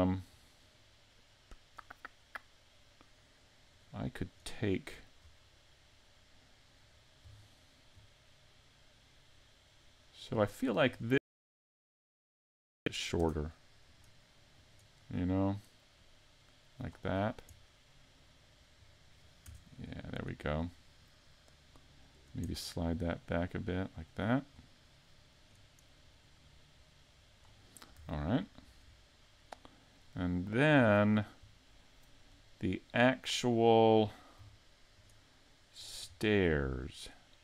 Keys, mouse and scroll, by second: 0.3-0.7 scroll down 4, 3.7 right click, 4.2 right click, 5.2 scroll up 3, 6.0 middle click, 6.9-7.4 scroll down 2, 7.4 shift+middle click, 8.3 middle click, 11.1 shift+middle click, 12.3 middle click, 12.4 right click, 13.2 Tab, 13.9 right click, 14.7 right click, 15.1 right click, 16.0 click, 17.2-17.6 scroll up 2, 17.6 middle click, 19.5 Tab, 20.6 scroll down 4, 20.7 scroll up 1, 23.0 click, 24.6-25.4 scroll up 1, 25.4 right click, 25.4-26.2 scroll up 1, 26.4 click, 28.0 scroll up 1, 28.0 a, 28.3-28.7 scroll down 3, 28.8 middle click, 30.4 shift+middle click, 31.1 scroll up 2, 31.5 middle click, 34.1 right click, 35.0 shift+right click, 35.8 shift+right click, 36.2-37.3 scroll down 2.